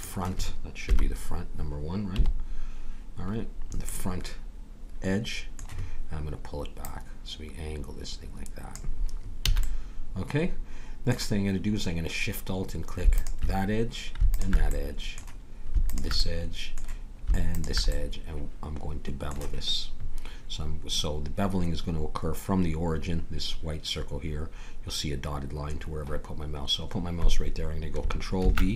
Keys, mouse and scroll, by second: 0.8 KP_1, 2.1 KP_5, 6.8-8.7 drag, 9.5 a, 9.6 middle click, 13.1-19.4 drag, 14.7-16.2 middle drag, 19.4 middle click, 28.4 ctrl+b.